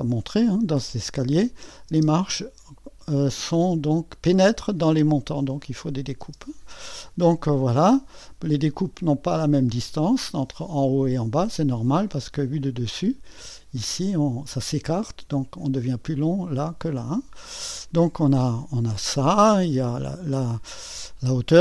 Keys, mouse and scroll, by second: 6.2 space, 7.2-10.4 drag, 12.0-17.0 drag, 18.5 click.